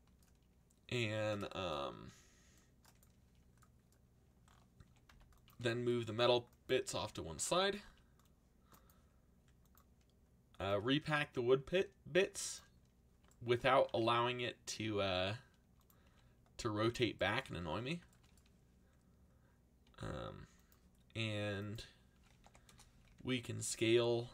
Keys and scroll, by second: 1.9 c, 4.6-5.6 typing, 6.7 c, 14.9 s, 16.0 g, 19.8 r, 21.9-23.5 typing.